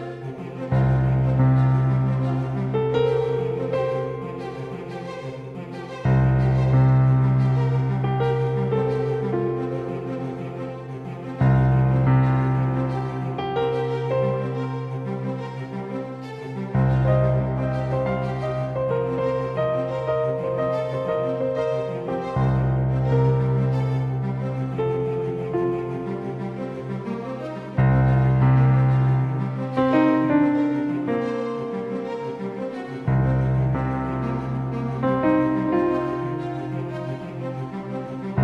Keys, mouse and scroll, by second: 3.2-5.5 drag, 4.1 s, 10.6-13.0 drag, 19.3-22.7 drag, 33.6-35.9 drag.